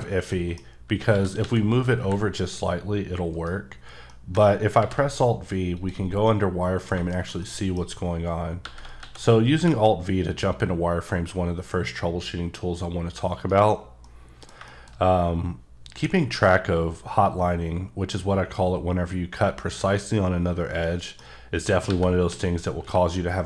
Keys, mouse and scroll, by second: 0.3 middle click, 1.1-2.0 typing, 3.3 right click, 4.1 middle click, 4.8 v, 5.7 click, 6.3 middle click, 6.9 scroll down 1, 7.1 middle click, 7.9-8.6 scroll up 2, 8.6 g, 9.0 x, 9.5 y, 13.3 right click, 13.8-14.6 scroll down 3, 14.0 middle click, 14.7 middle click, 14.9-15.9 scroll up 3, 16.1 middle click, 20.8 middle click, 21.3 scroll up 1, 21.9 g, 22.3 x, 22.9 y.